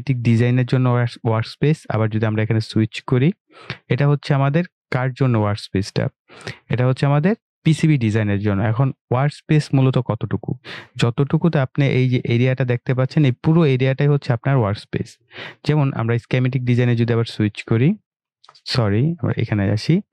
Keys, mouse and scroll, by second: 2.4 click, 17.2 click, 19.4 click.